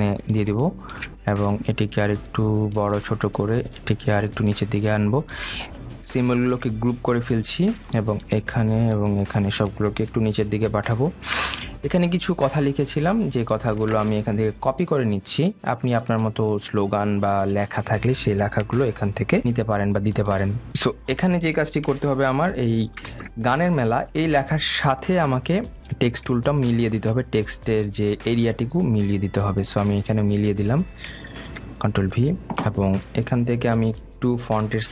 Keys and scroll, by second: 7.4 ctrl+g, 11.1 shift+Down, 20.2 ctrl+c, 23.0 shift+Down, 32.6 ctrl+v.